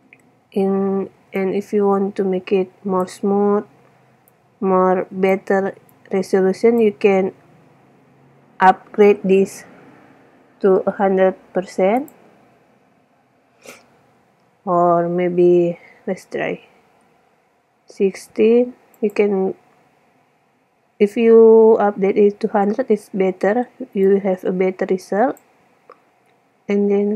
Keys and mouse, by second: 1.3 middle click, 1.8-3.1 middle drag, 4.6-7.5 drag, 8.0 middle click, 9.1-10.2 middle drag, 11.2-12.2 middle drag, 12.2 click, 24.3-26.2 drag, 26.2-26.7 middle drag.